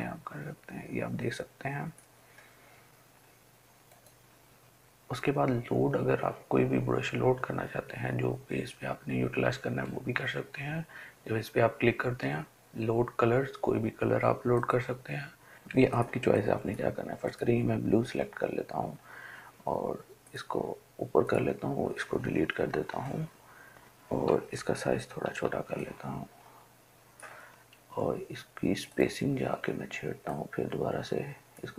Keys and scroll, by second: 22.7 Delete, 24.7-25.6 typing.